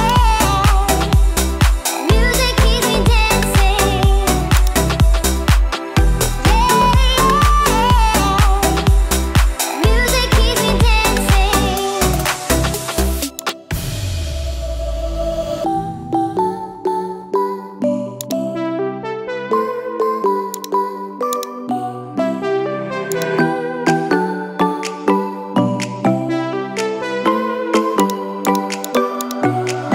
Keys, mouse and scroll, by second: 5.2 click, 6.1 space, 12.4 space, 13.4-16.1 drag, 20.6-21.5 drag, 23.2-24.2 drag, 28.0 click, 28.5 click, 28.9 click, 29.2 click.